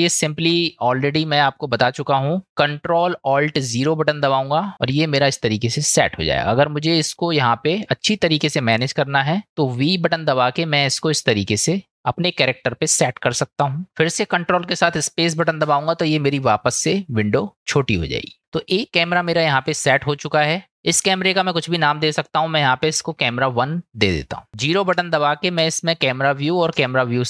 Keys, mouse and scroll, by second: 4.7 ctrl+alt+KP_0, 15.6 ctrl+space, 20.7-24.2 drag, 24.9 KP_0, 26.7 KP_0.